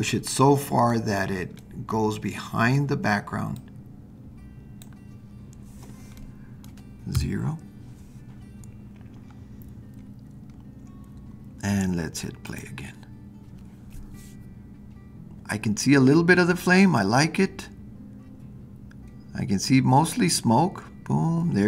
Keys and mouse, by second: 1.7-2.8 middle drag, 3.5-4.8 drag, 6.2-6.7 middle drag, 7.1 KP_0, 12.6 click.